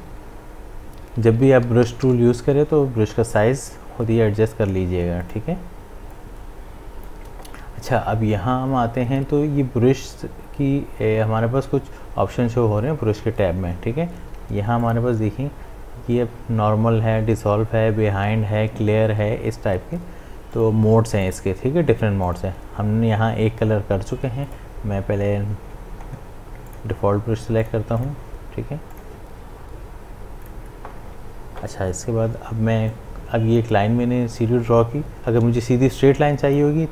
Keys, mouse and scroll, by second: 0.0-2.1 typing, 5.2 right click, 5.4 right click, 6.1-9.3 drag, 14.8 click, 20.5 click, 24.4 right click, 25.7-26.7 scroll up 1, 26.7 click, 32.9-36.9 drag.